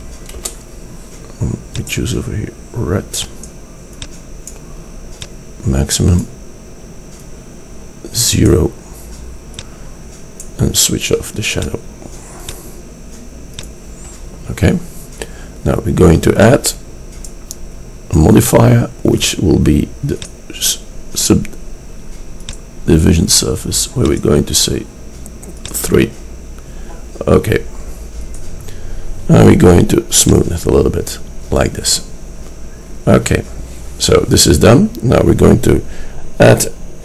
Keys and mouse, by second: 0.1-1.9 middle drag, 1.9-3.6 drag, 3.9-5.2 middle drag, 6.9 click, 7.1 middle click, 7.2-8.4 drag, 9.1 click, 9.2 middle click, 9.6-11.3 drag.